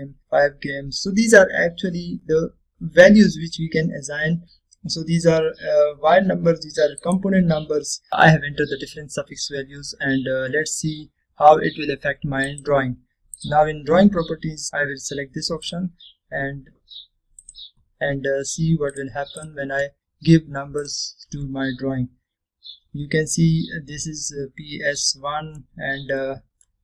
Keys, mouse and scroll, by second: 3.2 scroll down 1, 6.9-7.2 scroll down 1, 8.1 click, 13.6 click, 17.9-18.2 middle click, 20.0 click, 20.3 click, 23.2-23.7 scroll up 1, 26.1-26.8 middle click.